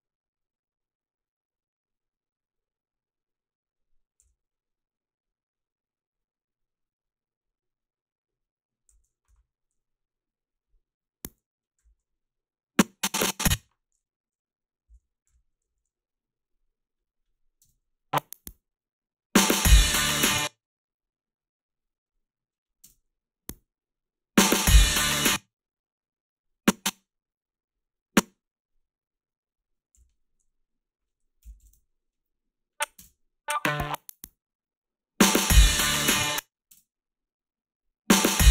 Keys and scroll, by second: 4.2 f, 11.8 i, 13.6 o, 14.6-16.1 typing, 17.7 space, 20.2 space, 22.9 space, 25.1 space, 29.9 g, 31.6 2, 33.0 space, 36.1 space, 36.7 space, 38.3 space.